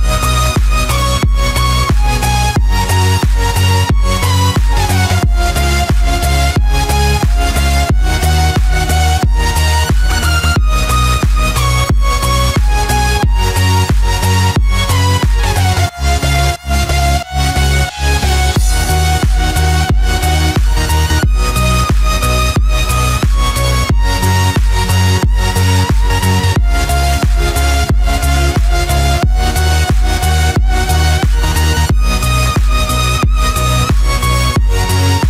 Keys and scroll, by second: 1.8 ctrl+-, 10.7 ctrl+=, 14.0 ctrl+-, 15.0 ctrl+=.